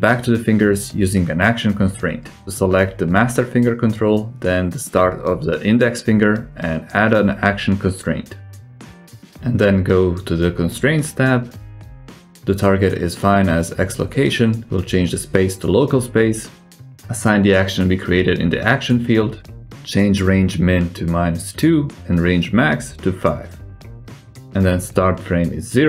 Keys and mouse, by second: 0.0 ctrl+Tab, 1.2-1.6 right drag, 2.1 right click, 3.2 shift+right click, 3.6 ctrl+shift+c, 9.3 click, 14.0-15.6 drag, 17.1-18.5 drag, 20.8-24.6 drag, 25.2-25.8 drag.